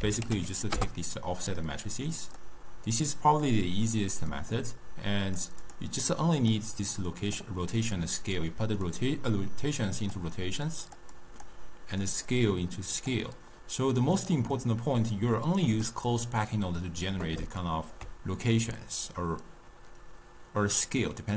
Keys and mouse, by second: 3.1 click, 3.9-5.3 middle drag, 5.3 click, 6.2 click, 6.8 click, 8.9 drag, 10.9 click, 11.2-12.2 drag, 14.2 click, 14.6-17.7 drag, 17.7-20.7 ctrl+middle drag.